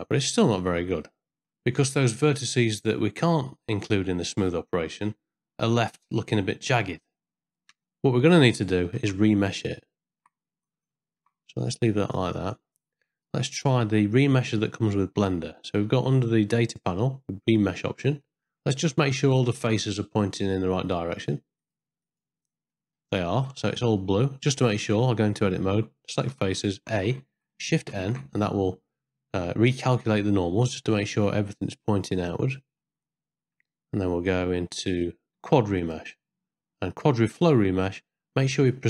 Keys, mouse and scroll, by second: 0.2 middle click, 0.7 ctrl+middle click, 1.1 shift+middle click, 3.9 ctrl+middle click, 4.5 shift+middle click, 7.9 middle click, 9.0 ctrl+z, 9.6 ctrl+click, 11.0 ctrl+shift+z, 11.6 click, 12.9 Tab, 13.6 ctrl+click, 15.7 middle click, 17.4 click, 18.3 middle click, 19.7-22.4 drag, 22.7 middle click, 23.2 ctrl+middle click, 23.6 shift+middle click, 24.0 middle click, 24.8 Tab, 26.3 3, 26.8 a, 27.9 shift+n, 29.8-32.8 middle drag, 33.4 Tab, 35.3 ctrl+z, 35.8 click, 37.0-38.8 drag.